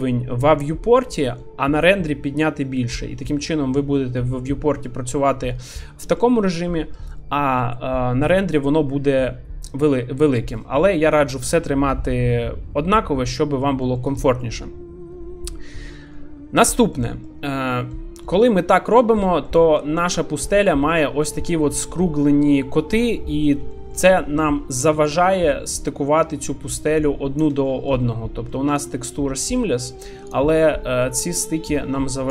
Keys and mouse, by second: 2.9-4.3 middle drag, 4.9 middle click, 5.8-6.2 middle drag, 13.3-13.6 middle drag, 13.8 shift+middle drag, 14.1 middle click, 17.0-17.3 middle drag, 17.8 shift+middle drag, 18.3 middle click, 19.1 shift+middle click, 19.4-19.8 middle drag, 21.0 middle click, 23.1-23.5 middle drag, 23.7 shift+middle drag, 25.0 shift+d, 25.8-27.4 drag, 27.6 shift+middle drag, 28.0-28.5 middle drag, 29.6-30.0 middle drag, 30.6-31.0 middle drag.